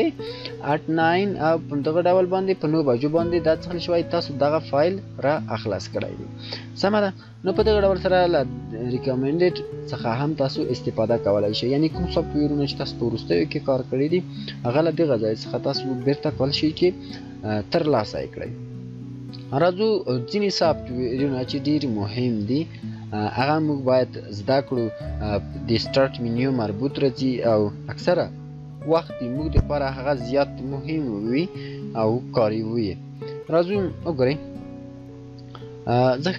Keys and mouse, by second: 7.3 shift+click, 22.5 shift+click, 35.0 shift+click.